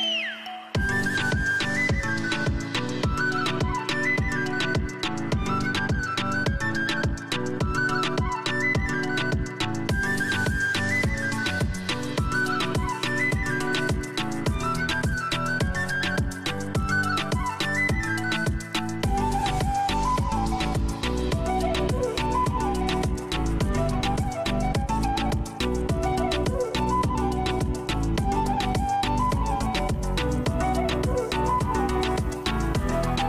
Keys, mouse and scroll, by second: 4.7 scroll, 8.3 scroll, 9.0 scroll down 4, 15.1 KP_0, 16.0 scroll down 4, 17.4 click, 17.7 click, 18.1 scroll down 1, 18.1-18.7 scroll up 11, 23.0 KP_0, 23.9 scroll down 4, 25.5 click, 30.6 click.